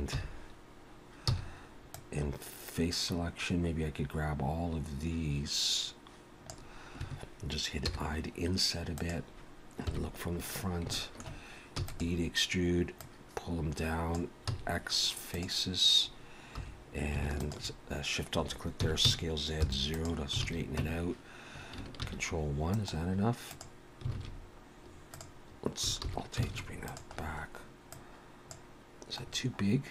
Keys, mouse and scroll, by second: 0.1-1.3 scroll up 1, 0.1 3, 1.3 c, 7.8 i, 9.9 KP_1, 10.5-10.9 scroll down 4, 10.9 shift+middle click, 11.8 e, 13.0 click, 14.5 x, 16.6 2, 17.4 alt+shift+click, 18.8 s, 20.4 alt+a, 20.8 Tab, 22.0 ctrl+1, 22.7 right click, 24.1 alt+a, 24.3-25.1 scroll down 4, 25.1 click, 26.0 alt+h, 26.4 alt+a, 26.9 click, 27.2-27.7 scroll down 3, 27.9 click, 27.9 scroll down 1, 29.3 scroll down 1.